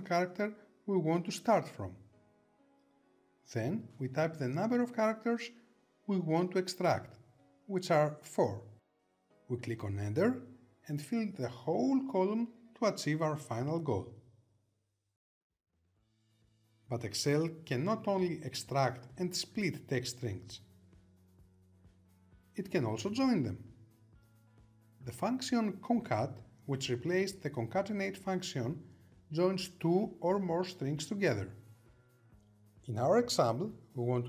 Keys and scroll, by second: 8.6 Return.